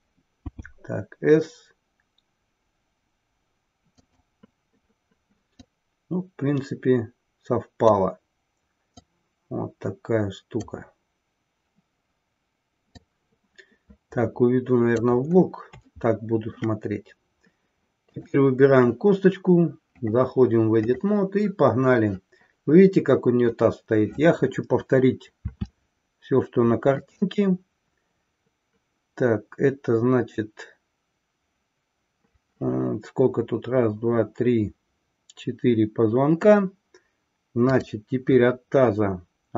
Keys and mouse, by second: 5.4 click, 8.8-10.7 drag, 13.0-15.1 drag, 16.0 shift+middle click, 20.0-21.0 drag, 27.0 click.